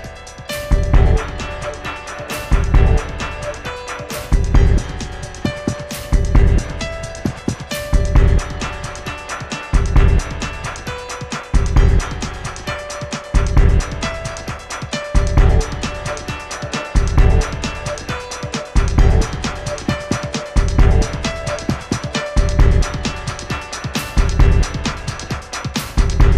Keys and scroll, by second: 13.1 Left, 13.2 Left, 13.3 Left, 13.4 Left, 20.5 Left, 20.6 Left, 20.7 Left, 23.5-24.6 typing.